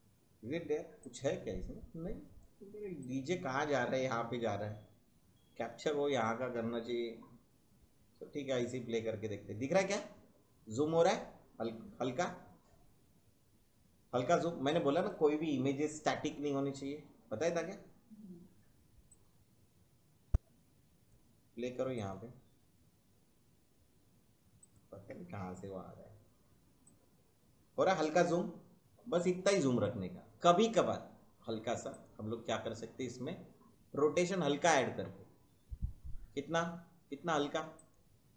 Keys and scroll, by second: 15.9 space, 18.2 space.